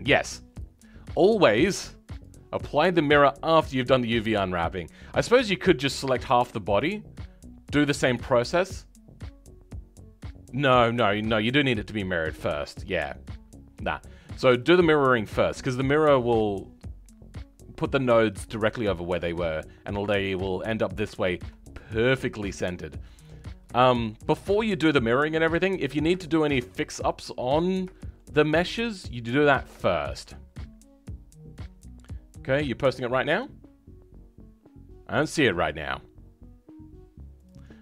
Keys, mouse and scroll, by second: 5.0 scroll down 2, 5.5-13.9 shift+middle drag, 13.9-14.5 scroll up 1, 14.5-37.8 shift+middle drag.